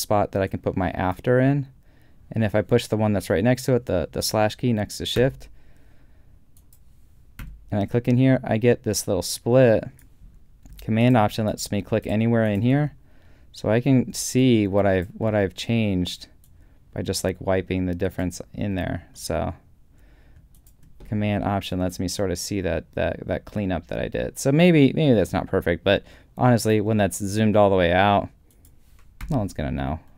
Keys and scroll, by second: 5.3 /, 7.4 /, 29.3 super+,.